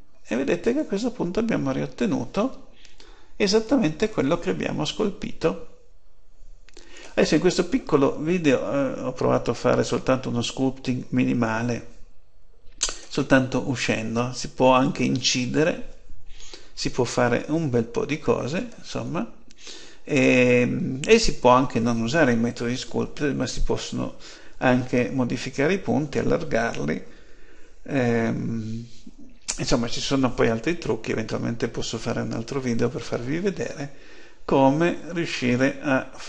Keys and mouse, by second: 1.4-2.5 middle drag, 8.2-10.1 middle drag, 16.6-24.1 middle drag, 35.4-36.2 middle drag.